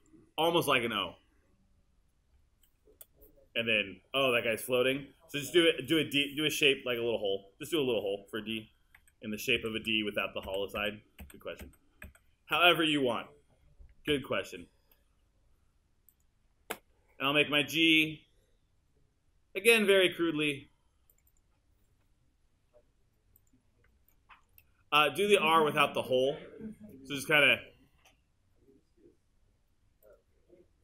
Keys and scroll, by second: 3.0 BackSpace, 5.0 BackSpace, 9.0 super+z.